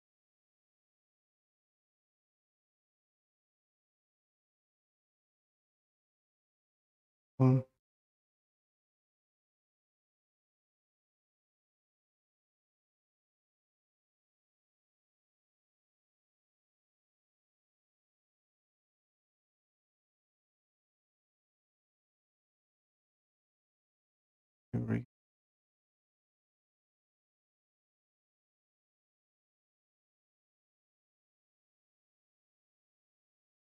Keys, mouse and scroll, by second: 5.0 click, 6.4 click, 14.2 click, 16.8 click, 18.3 click, 21.5 Delete, 23.9 click, 26.9 scroll, 28.2 scroll, 28.8-29.3 scroll down 7, 29.6-31.5 scroll down 12, 32.0 scroll.